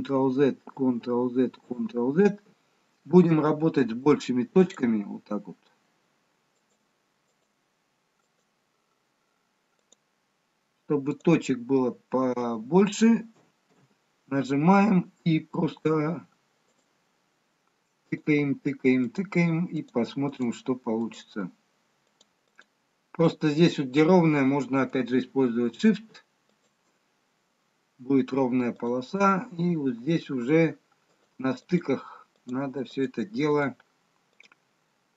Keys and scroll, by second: 1.6 ctrl+z, 14.0 z.